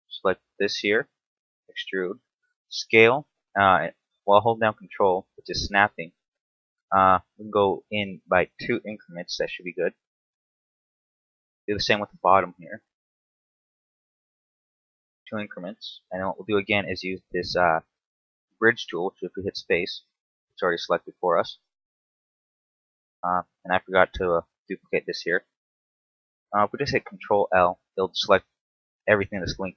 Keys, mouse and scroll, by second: 0.0 alt+right click, 0.4-1.0 scroll up 2, 1.5 e, 1.9 right click, 2.6 s, 8.9 ctrl+click, 9.5 middle click, 11.1 alt+right click, 11.5 scroll up 1, 12.0 shift+middle click, 12.6 e, 12.9 right click, 13.3 s, 15.3 ctrl+click, 15.8 scroll down 2, 16.0 middle click, 17.6 alt+shift+right click, 18.2-18.5 scroll up 2, 18.6 space, 20.5 scroll down 1, 21.0 Tab, 21.3 scroll down 2, 22.2 KP_7, 22.9 scroll down 2, 23.4 Tab, 23.7 shift+middle click, 27.2 ctrl+l.